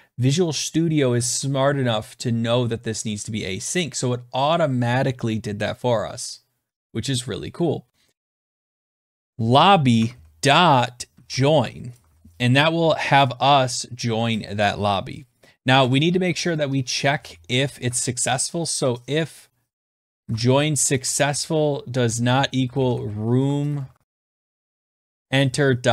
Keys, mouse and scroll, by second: 8.6-12.5 typing, 15.5 Return, 16.6-18.1 typing, 19.2-25.9 typing.